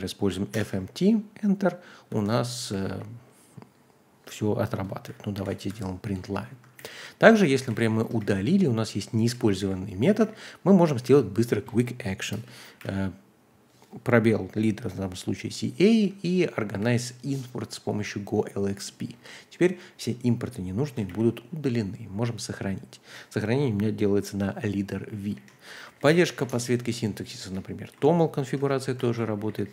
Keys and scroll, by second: 0.0-0.5 typing, 2.1-3.4 typing, 5.4 ctrl+g, 5.7 Escape, 5.8-10.2 typing, 6.8 ctrl+k, 9.6 ctrl+u, 12.3-13.3 typing, 16.8 typing, 18.7 typing, 20.2-21.6 typing, 24.5-26.5 typing, 25.3 ctrl+h, 27.4 ctrl+d, 27.6 ctrl+d, 28.6-29.7 typing, 29.1 ctrl+h.